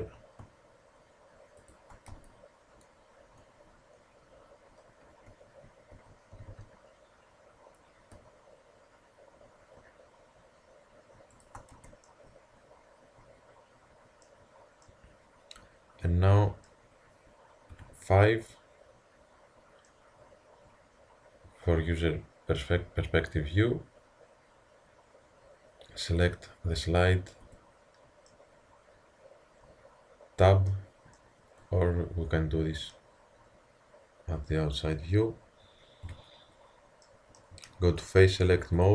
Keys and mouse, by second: 2.1 z, 5.3 z, 5.9 z, 6.3 g, 11.7 Tab, 17.8 KP_5, 22.7 middle click, 26.2-28.3 drag, 27.5 Tab, 36.0 KP_5, 38.7-38.9 drag.